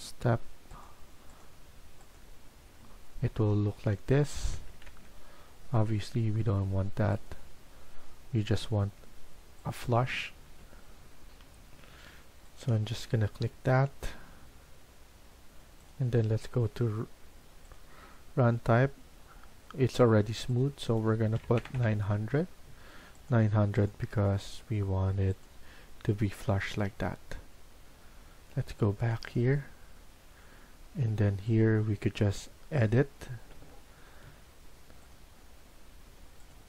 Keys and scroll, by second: 4.8 ctrl+z, 8.7 Escape, 11.1 F1, 11.2 ctrl+z, 21.0-22.0 typing, 34.1 Escape.